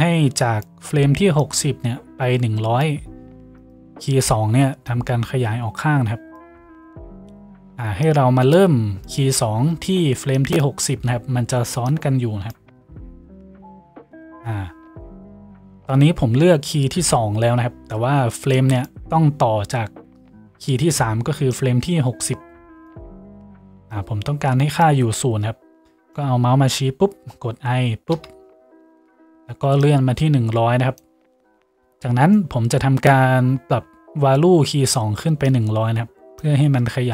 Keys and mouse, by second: 3.7-4.9 middle drag, 4.9-37.1 drag.